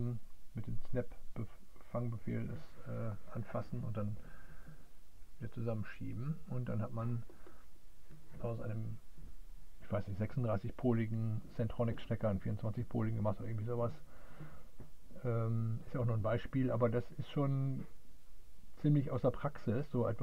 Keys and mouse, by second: 0.8 click, 2.7 click, 3.4-6.4 middle drag, 6.7-20.2 middle drag.